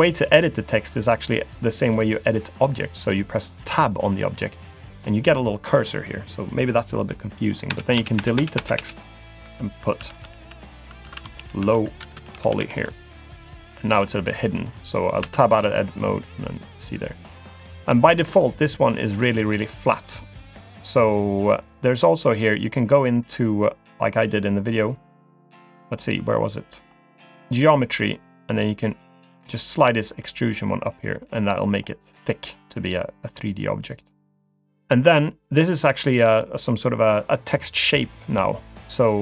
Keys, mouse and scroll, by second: 3.6 Tab, 7.8-8.8 typing, 10.0-12.6 typing, 11.0 ctrl+a, 15.3 Tab, 16.2 click, 17.6 scroll up 2, 18.0 shift+middle click, 18.6 middle click, 21.9-24.3 scroll down 2, 24.3-25.6 scroll down 2, 25.6-26.0 scroll down 2, 26.0-26.9 scroll up 3, 26.9-27.4 scroll up 3, 27.4-29.8 scroll up 1, 29.8 click, 31.7-32.2 scroll down 1, 32.2 click, 32.7 middle click, 34.0 click.